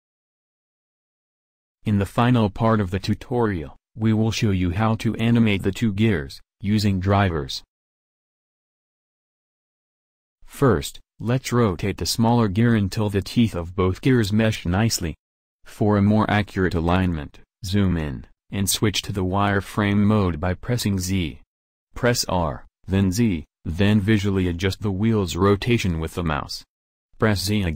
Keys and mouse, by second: 14.5-17.1 middle drag, 20.0-23.3 middle drag, 20.0 z, 23.8 r.